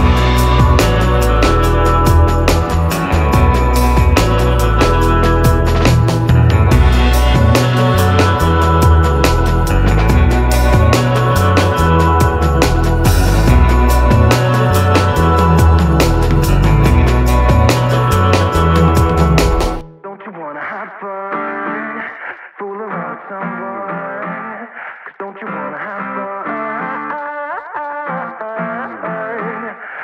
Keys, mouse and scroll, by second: 1.1 middle click, 1.3 scroll up 1, 2.0 middle click, 2.7-3.4 scroll up 1, 3.9-8.4 drag, 9.8 right click, 11.1 click, 13.4-14.9 typing, 15.0-28.7 drag, 29.4-30.0 typing.